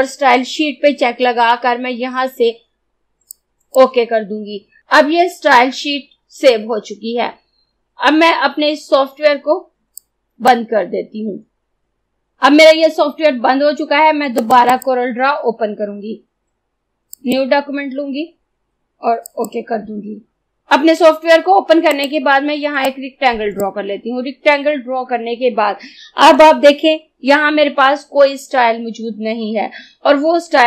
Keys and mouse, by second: 3.4-4.8 drag, 10.0-12.3 drag, 14.4 click, 17.2 click, 20.3 Delete, 21.9-30.6 drag.